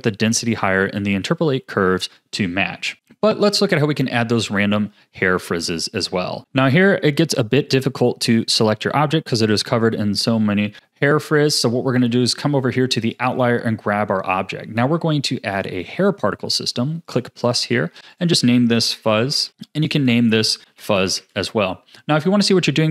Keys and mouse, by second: 0.5 click, 6.4 ctrl+s, 7.7 click, 17.1-17.4 drag, 18.1-19.5 drag, 19.3 z, 20.0-21.6 drag, 21.2 z.